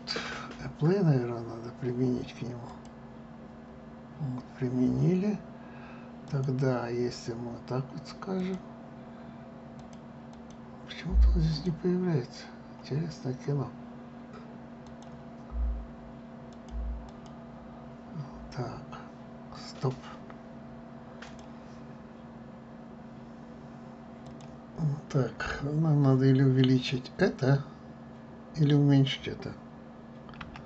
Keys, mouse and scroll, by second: 0.1 click, 3.1 click, 6.6 click, 8.8 click, 10.2-12.1 drag, 13.4 scroll down 1, 15.3 click, 17.5 click, 25.0 click, 26.2-29.3 scroll down 5.